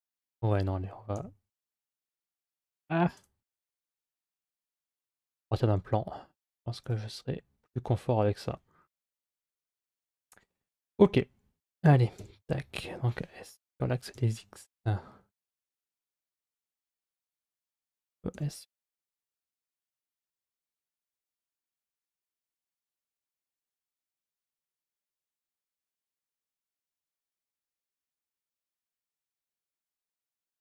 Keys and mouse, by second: 1.0 x, 3.0 Tab, 4.1 x, 5.6 shift+a, 11.6 Tab, 12.0 s, 18.1 s, 21.3-22.4 middle drag, 25.6 s, 27.8 middle click, 29.1 g.